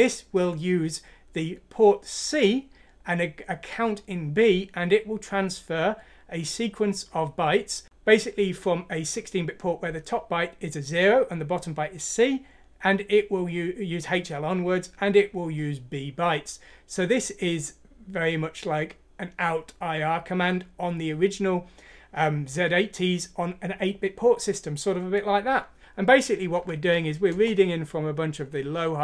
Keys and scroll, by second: 26.6 F6, 27.3 Return.